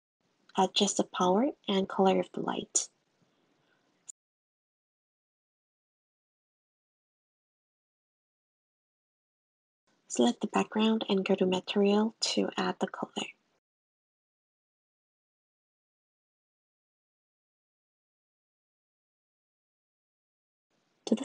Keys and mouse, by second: 1.6 click, 2.6 click, 3.2-4.7 drag, 3.9 0, 5.5 click, 11.0 click, 14.0 click, 18.0 click, 18.8 click, 19.6 click, 20.4 click.